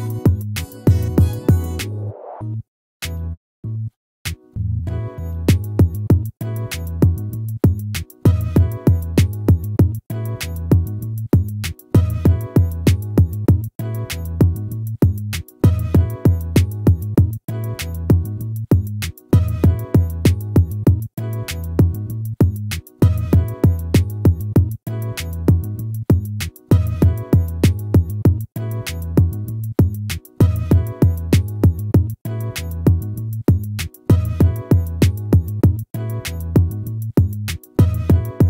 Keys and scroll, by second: 6.8 ctrl+-, 10.4 ctrl++, 19.0 ctrl+z, 21.1 ctrl+-, 24.3 ctrl++.